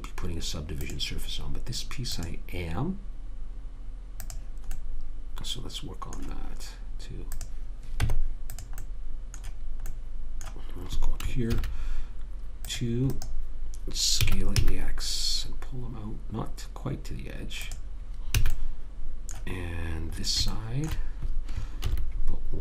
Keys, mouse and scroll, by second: 1.1-4.1 drag, 5.1-7.0 middle drag, 7.7 click, 8.3 Tab, 11.9 ctrl+r, 14.6 s, 18.7 a, 20.5 middle click, 22.1 ctrl+r.